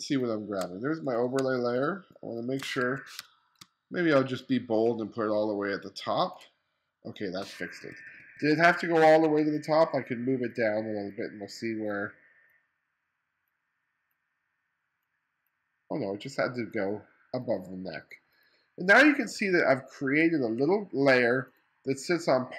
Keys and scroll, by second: 1.4 space, 2.9 2, 3.2 space, 7.9 2, 19.4 2.